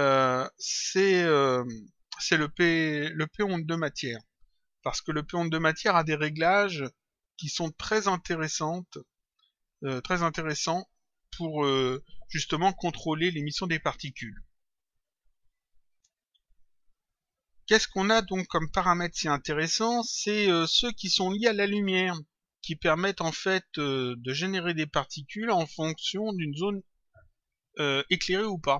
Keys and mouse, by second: 15.8 click, 27.6 click.